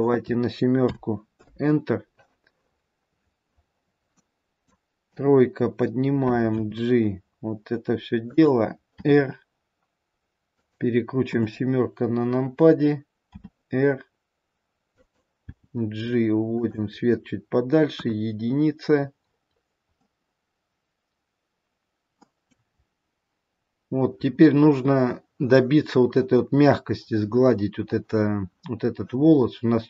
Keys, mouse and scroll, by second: 0.0 click, 3.1-3.8 scroll down 2, 4.5 middle click, 4.5-5.3 scroll down 3, 5.3 KP_3, 6.9 g, 9.2 r, 11.5 KP_7, 13.4 r, 15.6 g, 18.2 KP_1, 19.3-19.8 scroll up 2, 20.2 middle click, 20.2-21.1 scroll up 3, 23.0-23.7 scroll up 2, 25.9-27.8 scroll up 1.